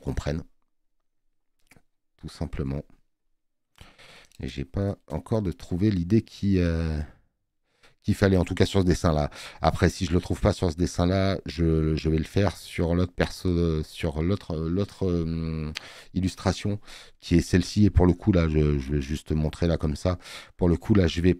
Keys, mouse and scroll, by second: 16.4 click, 19.9 click, 19.9 space.